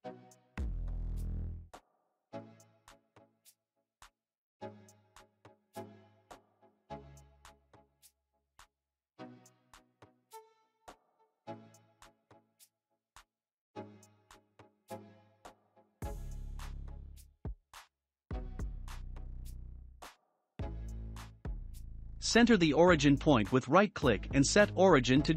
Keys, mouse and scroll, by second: 2.0-2.7 scroll up 2, 3.1 click, 3.1 scroll up 1, 3.8 click, 7.5 scroll up 1, 7.5-8.3 middle drag, 8.3 click, 9.2 scroll up 1, 11.7-12.8 drag, 15.5-17.4 middle drag, 17.4 shift+d, 19.5-21.8 shift+middle drag, 21.8-25.3 right drag.